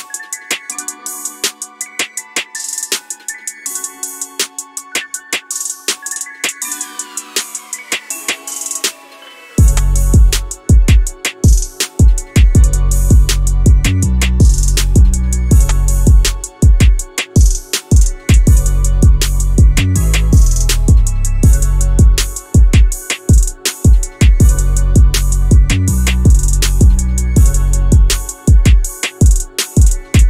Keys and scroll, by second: 12.6 Escape, 21.5 b.